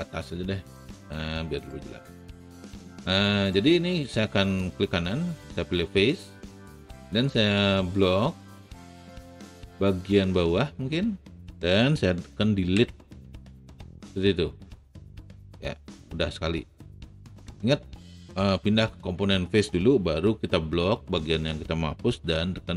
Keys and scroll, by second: 12.6 Delete.